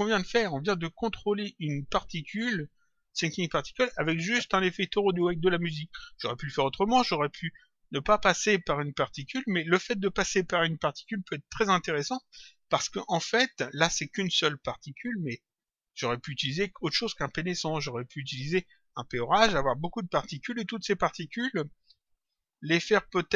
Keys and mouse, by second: 15.3 click.